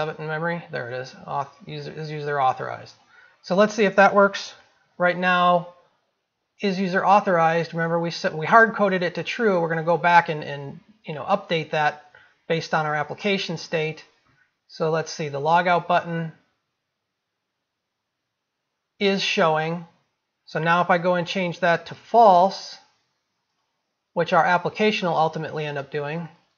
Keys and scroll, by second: 0.4 ctrl+v, 5.0 ctrl+s.